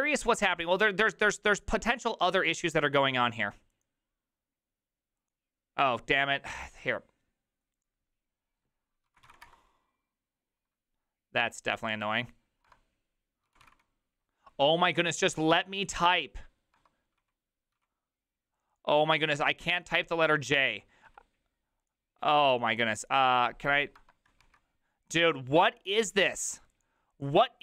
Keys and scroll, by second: 9.1 j, 12.6 BackSpace, 17.2 Left, 17.2-17.7 typing, 20.1-21.1 typing, 23.7 Right, 24.0 BackSpace, 24.4 1.